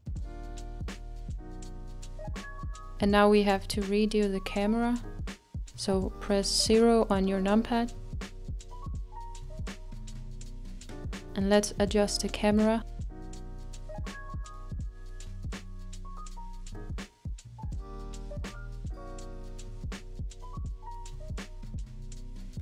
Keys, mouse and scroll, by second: 0.6 click, 1.2-2.7 middle drag, 2.7-3.9 scroll down 6, 3.9 scroll down 2, 4.0-5.1 middle drag, 6.1 click, 7.6 KP_0, 9.5 click, 11.3-14.1 scroll up 1, 16.4-19.4 drag, 19.7 g, 19.7-21.2 middle drag, 21.2 g, 21.4-22.6 shift+middle drag.